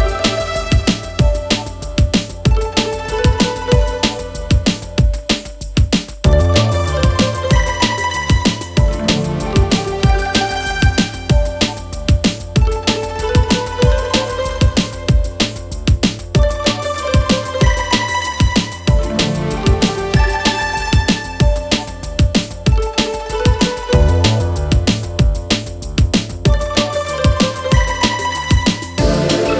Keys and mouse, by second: 1.0-1.5 middle drag, 1.8-2.4 ctrl+middle drag, 2.6-2.9 shift+middle drag, 4.1 shift+middle click, 4.4 middle click, 4.9-5.5 ctrl+middle drag, 6.9 click, 7.2 click, 7.6 middle click, 7.6 right click, 8.5 middle click, 8.5-10.2 right drag, 9.5-10.2 drag, 10.5-10.8 shift+drag, 10.5-10.8 shift+right drag, 11.3-12.0 right drag, 13.2 drag, 13.2 right drag, 13.5-14.2 middle drag, 14.4-14.7 shift+middle drag, 15.2 shift+middle click, 15.8-16.4 middle drag, 16.6-17.0 shift+middle drag, 17.4 shift+middle drag, 18.0-18.8 shift+middle drag, 19.1-19.7 shift+middle drag, 20.0-20.6 shift+middle drag, 21.3 middle drag, 22.0-22.4 shift+middle drag, 22.7 shift+middle drag, 23.3-23.6 shift+middle drag, 26.6-29.4 middle drag.